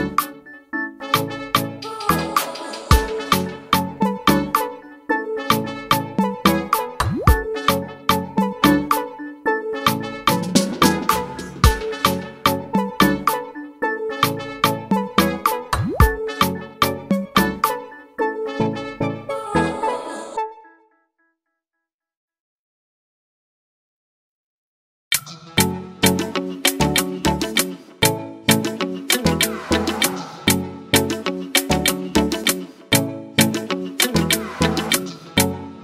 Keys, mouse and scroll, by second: 0.3 click, 5.7 ctrl+z, 14.0 click, 17.2 ctrl+z, 25.8 click.